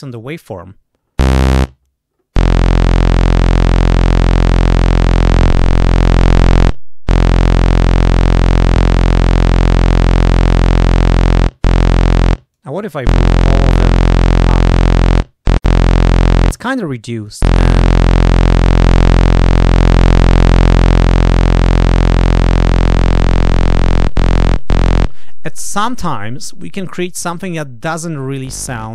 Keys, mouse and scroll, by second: 4.2-6.5 drag, 8.6-11.4 drag, 12.5 click, 13.3 click, 17.0 click, 18.4 click, 20.8-23.7 drag.